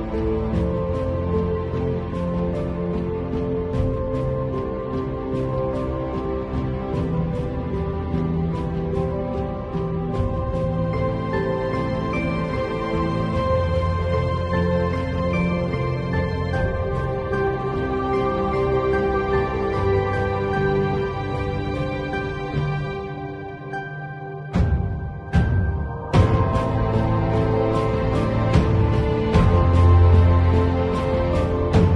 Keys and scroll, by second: 6.4 space, 11.1 [, 11.8 [, 14.6 ], 18.3 ], 19.2 ], 19.7 [, 20.8 ], 21.2 [, 21.5 ], 23.4 [, 24.6 x, 25.4 x, 25.7 ], 28.2 ], 28.9 [, 29.5 ], 30.5 space, 31.0 [.